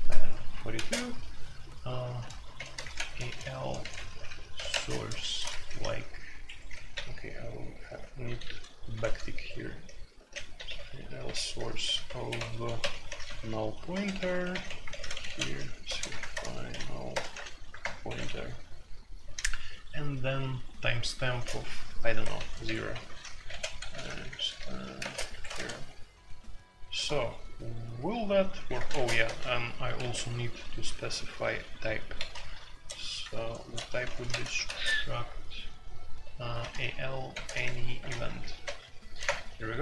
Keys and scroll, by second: 0.0-0.7 typing, 2.4-19.2 typing, 6.4 Escape, 21.3-30.5 typing, 32.1-34.6 typing, 36.4-39.2 typing.